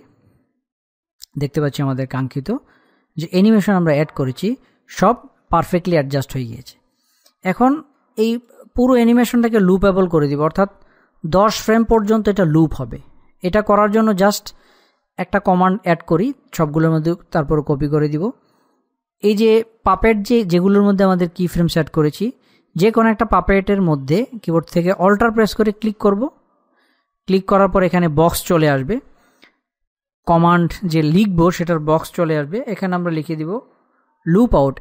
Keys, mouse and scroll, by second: 7.2-14.8 drag, 25.8 alt+Num_Lock, 26.4 alt+click.